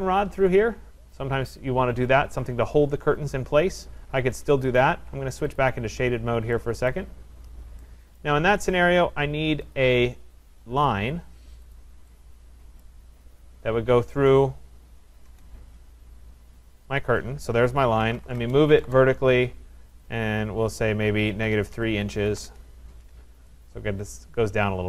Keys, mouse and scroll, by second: 4.8 click, 5.6 click, 6.1-6.9 scroll, 6.9 right click, 7.2-7.9 scroll, 8.2 right click, 8.4 Escape, 8.4 middle click, 8.6 Escape, 9.8 click, 11.8 click, 12.8 right click, 14.3 click, 15.3 Return, 17.0 click, 17.8-18.8 typing, 20.0 click, 21.2-22.8 typing, 23.4 Return.